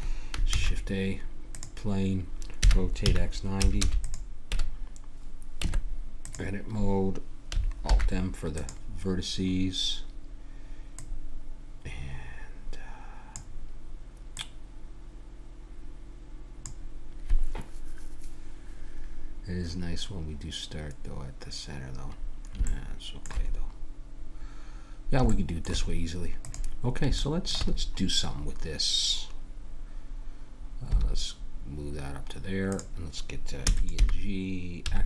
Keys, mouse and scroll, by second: 0.5 shift+a, 2.6 r, 5.6 Tab, 7.9 alt+m, 9.4 middle click, 10.9 right click, 11.4 right click, 12.4 click, 14.3-16.6 drag, 22.6 middle click, 23.5 middle click, 26.4 click, 27.3 middle click, 27.4-30.9 drag, 27.7 middle click, 30.9 g, 33.6 e, 34.0 g.